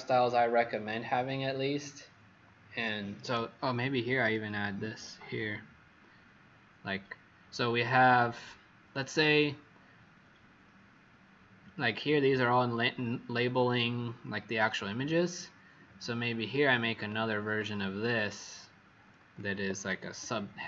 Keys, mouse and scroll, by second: 15.8-18.1 scroll up 2, 18.1 click, 19.5 alt+Caps_Lock, 19.5 alt+click.